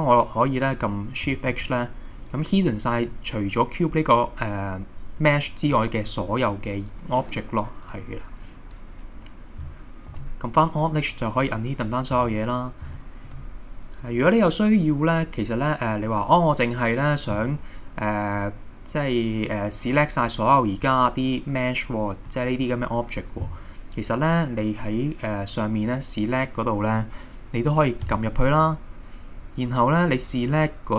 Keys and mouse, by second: 1.5 shift+h, 7.9 click, 10.1 alt+h, 13.0-13.4 shift+middle drag, 14.4-16.2 middle drag, 22.3 middle click, 28.2-30.9 drag.